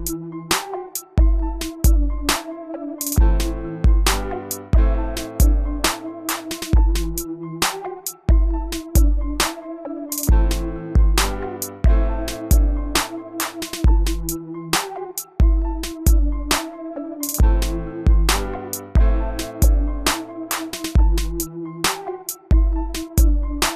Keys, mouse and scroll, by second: 1.2 right click, 1.9 click, 4.2 ctrl+click, 6.3 click, 11.2 s, 12.4 click, 17.8-18.3 typing, 18.7 Return, 20.2 click, 21.0 right click, 21.8 click.